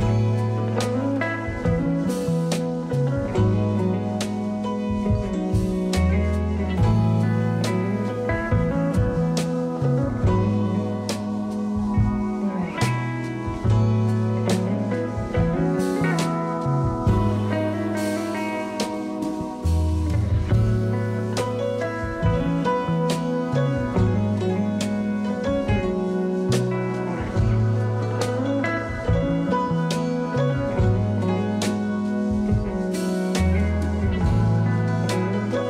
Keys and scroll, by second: 0.3 alt+e, 0.9 s, 7.7 2, 14.1 3, 21.1 s, 22.7 s, 27.5 alt+q, 32.1 w.